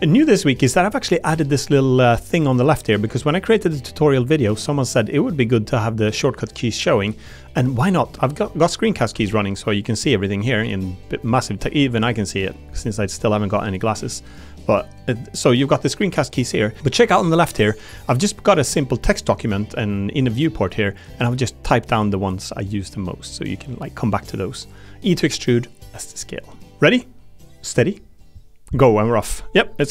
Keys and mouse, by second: 9.1 Tab, 13.3 Tab, 17.3 click, 18.7 click, 19.4 click, 29.8 click.